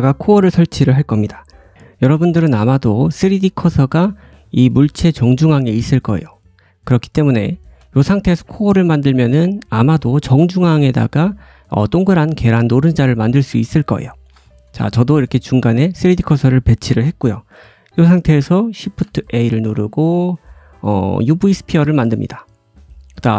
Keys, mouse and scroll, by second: 1.7 shift+middle click, 3.2 shift+middle click, 4.5-6.2 drag, 7.3 shift+middle click, 13.8 shift+middle click, 18.8 shift+a, 23.2 s.